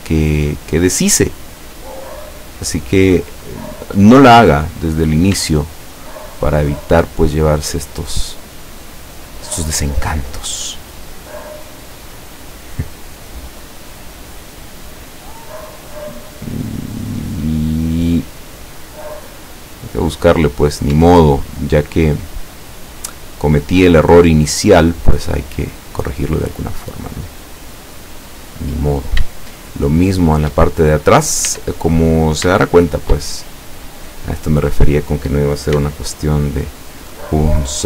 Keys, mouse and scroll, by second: 3.1-5.2 drag, 5.5-8.2 shift+middle drag, 9.1 right click, 10.6 scroll up 2, 11.2-12.6 middle drag, 13.6-21.0 drag, 19.7-21.0 middle drag, 21.0 Tab, 21.4-21.7 scroll down 2, 22.0-23.5 middle drag, 23.7 scroll down 2, 24.2-25.6 middle drag, 26.6-29.3 middle drag, 30.0-30.5 shift+middle drag, 30.7-31.4 shift+middle drag, 32.1 Tab, 32.1 scroll up 1, 32.6-33.3 shift+middle drag, 33.7 scroll up 2, 34.7 right click, 35.8 x, 37.1-37.8 middle drag.